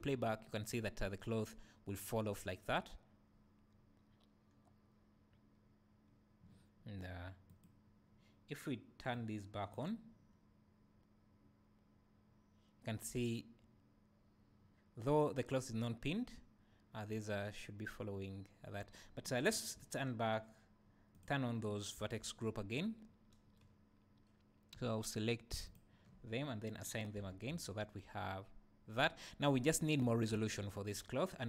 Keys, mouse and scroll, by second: 7.5 click, 9.1-21.2 drag, 19.5 Escape, 22.0 Tab, 25.6 alt+click, 26.7-31.4 drag, 27.1 Tab, 27.3 Tab, 27.5 space, 30.0 Escape.